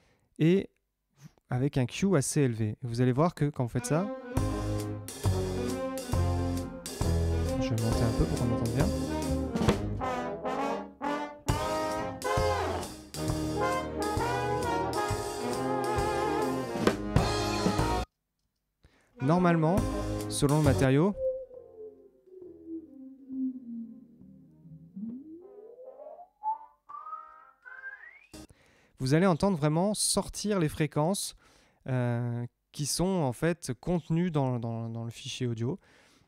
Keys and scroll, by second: 3.0 space, 18.0 space, 28.4 space.